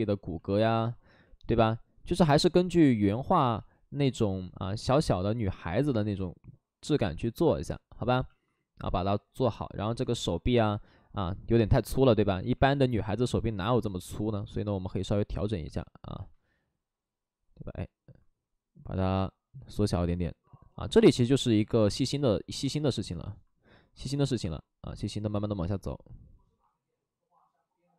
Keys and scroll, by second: 0.5 2, 3.5 ctrl+z, 12.8 2.